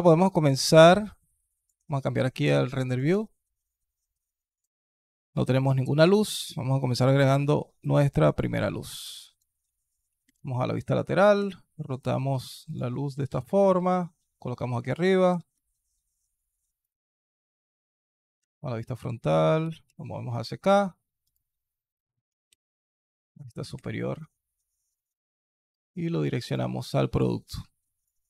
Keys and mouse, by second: 0.3-0.7 alt+drag, 1.3 alt+click, 4.8 alt+click, 6.2 shift+a, 10.1 alt+KP_3, 11.2 r, 13.1 g, 15.1 r, 18.2 alt+KP_1, 19.4 g, 22.3 alt+KP_7, 23.6 r, 27.8 alt+drag.